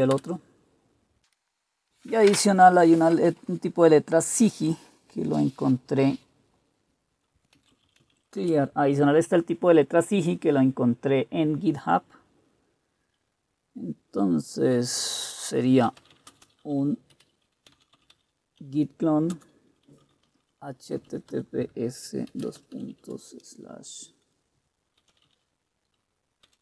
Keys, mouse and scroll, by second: 0.2 Return, 1.3 Return, 7.6-8.7 typing, 15.7-23.1 typing, 24.9-26.6 typing.